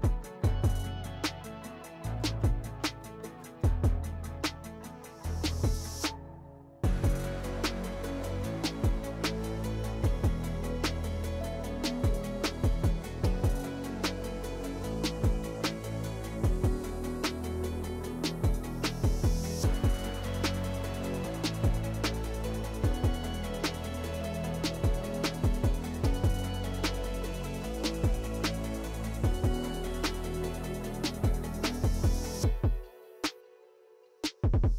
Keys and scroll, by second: 1.8 ctrl+z, 2.1 2, 5.7 s, 8.3 s, 10.5 s, 16.2 s, 19.4 s, 20.5 s, 21.6 s, 24.5 s, 25.6 s, 28.6 s, 29.6 s, 32.1 s, 34.2 alt+e.